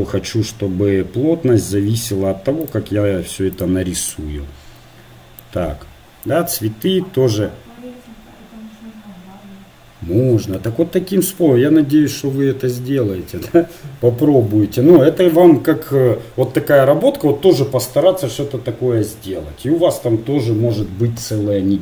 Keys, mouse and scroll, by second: 4.2-5.4 right drag, 5.4-6.6 drag, 6.6-9.0 middle drag.